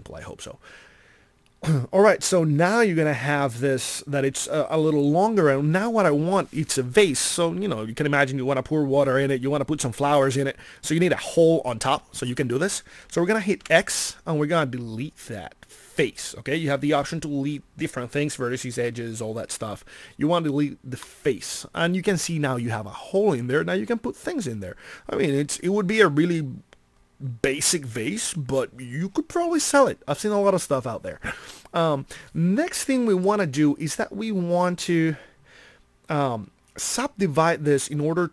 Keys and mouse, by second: 9.7-12.2 middle drag, 13.5 x.